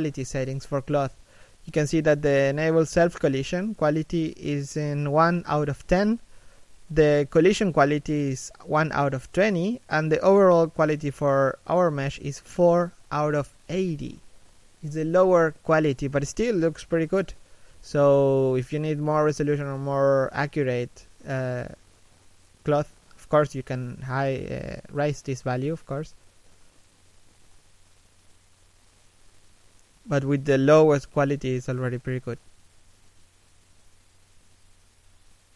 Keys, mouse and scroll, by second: 7.8 scroll down 1, 8.0 middle click, 8.4 a, 8.5 middle click, 10.2-10.5 scroll up 1, 10.5 middle click, 12.2 shift+middle click, 12.5 middle click, 26.4-27.2 scroll down 1, 27.2 shift+middle click, 29.0-29.4 scroll up 1, 29.5 middle click, 30.2 middle click, 35.2 middle click.